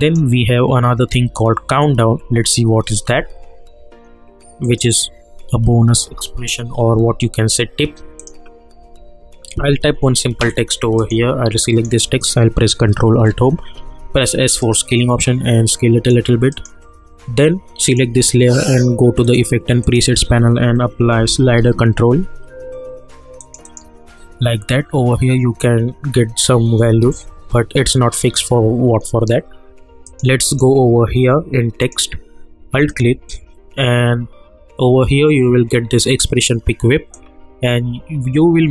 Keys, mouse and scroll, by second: 0.0 click, 4.6 click, 8.2 click, 9.7 1, 11.0 click, 13.1 ctrl+alt+Home, 13.8 s, 14.6-16.5 drag, 20.1 ctrl+a, 20.8-22.1 typing, 23.4-27.0 drag, 27.0 ctrl+z, 30.0 click, 32.9 alt+click, 37.1-38.7 drag.